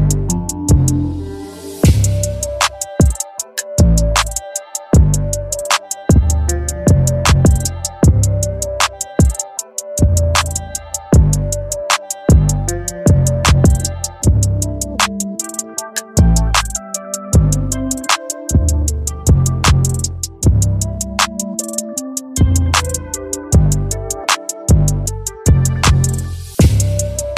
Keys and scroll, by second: 5.3 x.